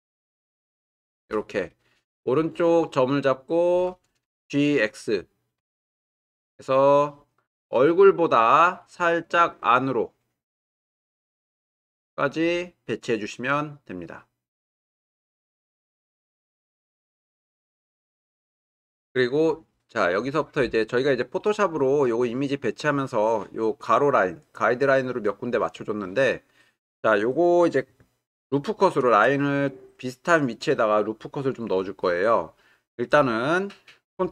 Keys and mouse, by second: 2.5 click, 5.6 g, 5.8 x.